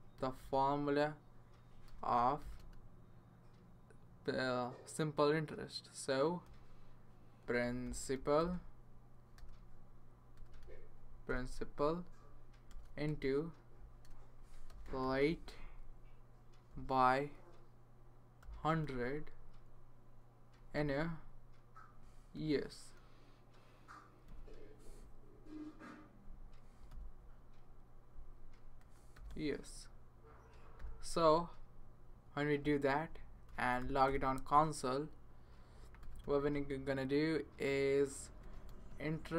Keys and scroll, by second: 0.0-0.6 typing, 1.8-2.6 typing, 6.4-10.3 typing, 11.3 Return, 12.7-16.7 typing, 18.1-19.3 typing, 20.7 *, 22.3 y, 24.2 e, 26.9 s, 28.5-30.8 typing, 33.5 Return, 33.8 typing, 34.0 Return, 35.7-36.7 typing, 38.1-39.3 typing.